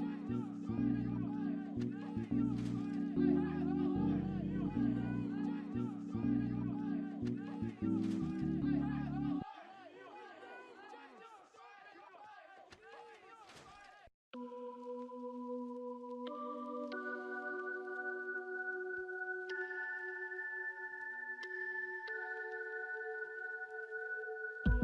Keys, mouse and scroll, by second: 0.8 scroll up 1, 2.5 scroll down 1, 2.9 alt+middle click, 3.3 scroll down 1, 3.9 alt+middle click, 4.3 alt+scroll down 1, 5.1 alt+middle click, 5.5 right click, 8.3 double click, 9.7 alt+middle click, 10.0 alt+scroll up 1, 13.5 double click, 14.6 scroll down 1, 15.2 alt+middle click, 15.6-15.9 alt+scroll up 1, 16.4 ctrl+z, 16.9 scroll up 1, 17.6 alt+middle click, 18.1-18.8 scroll up 1, 19.0 scroll down 1, 21.2 alt+middle click, 22.0-22.7 alt+scroll up 1, 22.7 scroll down 1, 23.3 alt+middle click, 23.8-24.1 scroll up 1, 24.3 scroll down 1, 24.5 alt+middle click.